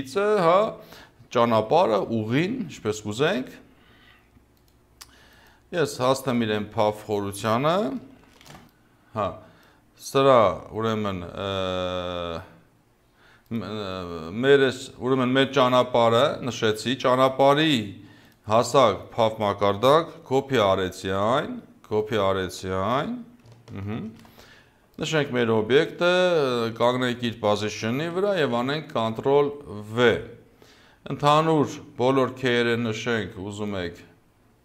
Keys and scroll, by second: 8.2 ctrl+c, 24.0 ctrl+c, 28.2 ctrl+v.